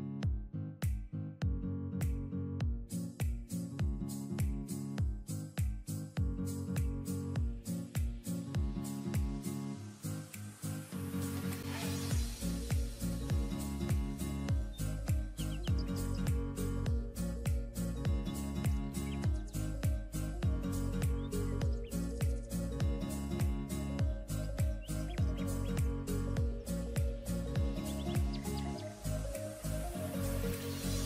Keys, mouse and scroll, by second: 1.1 double click, 1.6 scroll up 1, 2.6 double click, 6.0-6.4 alt+scroll up 1, 6.8 double click, 10.1 double click, 10.6-12.0 typing, 11.2 double click, 15.2 double click, 17.6 double click, 18.8-19.1 typing, 19.5 double click, 23.2-23.5 ], 23.7 ], 23.9 ], 24.0 ], 24.4 right click, 26.3-26.9 scroll down 1, 27.6-29.2 typing.